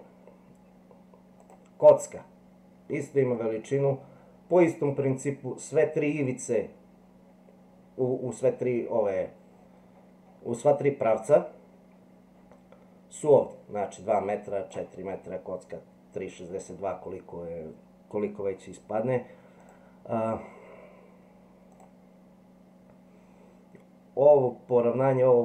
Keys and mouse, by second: 13.3-14.7 drag, 19.6 click.